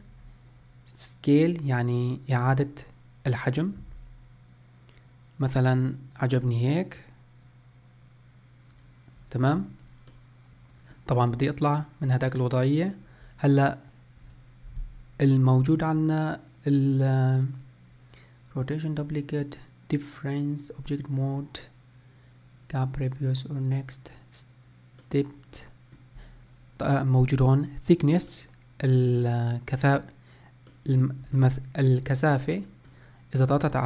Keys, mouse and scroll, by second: 10.2-14.9 middle drag, 25.1-28.2 middle drag, 28.4-33.8 middle drag.